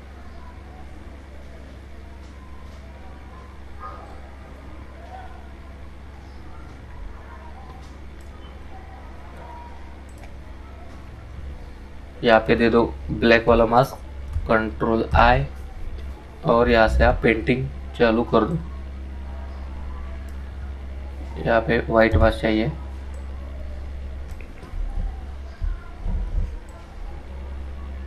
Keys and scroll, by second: 13.6 ctrl+i.